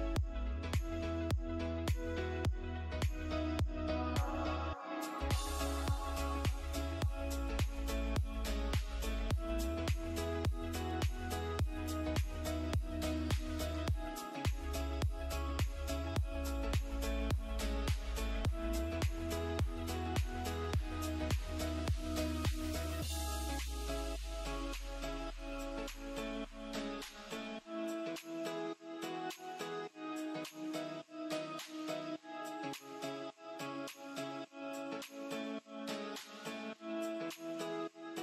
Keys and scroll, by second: 7.4 space, 7.9 F2, 16.6 space, 16.9 F3, 17.8 F2, 19.1 F3, 19.7 F2, 21.0 F3, 26.0 space, 29.0 space, 29.8 shift+F2, 30.0 F3, 35.5 space, 35.6 F3.